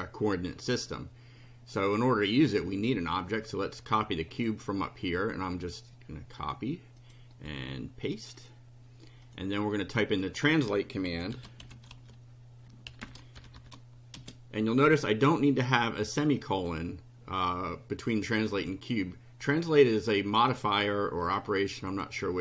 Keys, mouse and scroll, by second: 1.8 click, 3.5-4.6 drag, 5.0 right click, 6.4 click, 7.0 click, 7.3 right click, 8.4 click, 9.2 click, 10.0 click, 10.9-14.2 typing, 16.4 click, 18.2 click, 18.6 click, 19.6-20.6 drag, 21.3 click, 21.9 click.